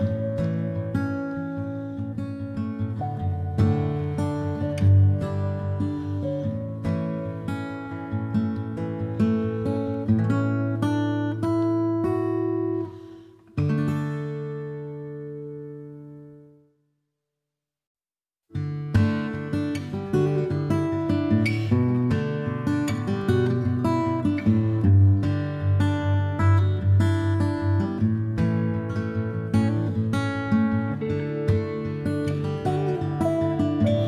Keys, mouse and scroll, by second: 1.1-2.6 shift+drag, 2.6-26.7 middle drag, 8.5 g, 18.1 g, 21.9 e, 25.3 g, 28.3 g.